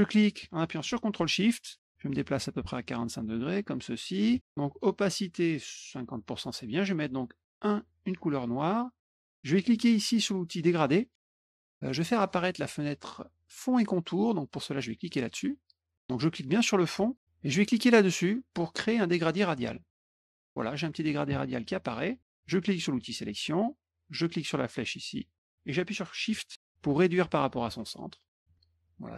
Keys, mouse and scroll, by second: 7.5 click, 10.7 click, 15.0 click, 16.3 click, 19.7 click, 23.1 click, 25.2-28.3 drag, 28.8 click.